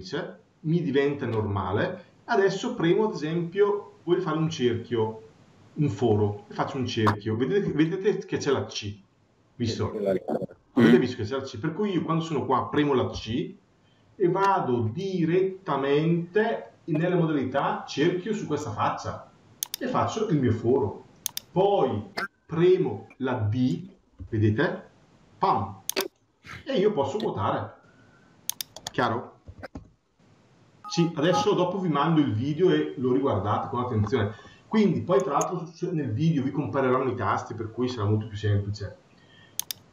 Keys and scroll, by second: 29.6 Return.